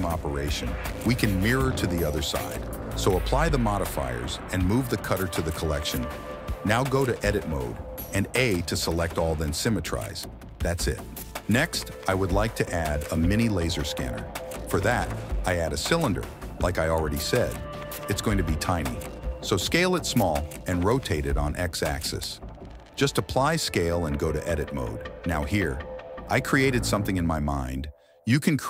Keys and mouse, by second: 1.9 ctrl+a, 2.7 click, 3.5 m, 4.9 click, 6.7 Tab, 7.2 a, 8.3 q, 9.8 Tab, 10.9 click, 11.7 shift+s, 15.2 KP_1, 16.1 shift+middle click, 16.8 shift+a, 18.5 s, 19.9 r, 20.9 ctrl+z, 21.2 r, 23.6 Tab, 24.0 click, 24.4 click, 24.7 click, 24.9 ctrl+b, 25.8 click, 26.2 i, 26.7 alt+e, 28.3 shift+middle click.